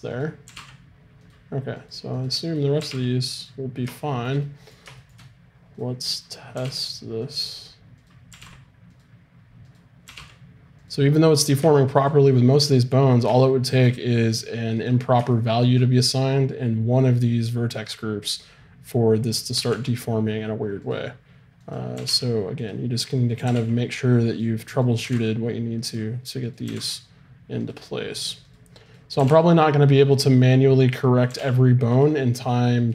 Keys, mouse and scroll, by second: 0.5 r, 2.8 r, 4.0 click, 4.2 middle click, 5.8-7.2 drag, 5.8-7.1 right drag, 8.3 r, 10.1 r, 14.3 click, 15.3-16.5 right drag, 15.5-16.5 drag, 19.6 r, 21.6-24.2 right drag, 22.0 r, 23.5 r, 25.0 r, 26.7 r, 29.2 r, 31.3 r, 32.8-32.9 right drag.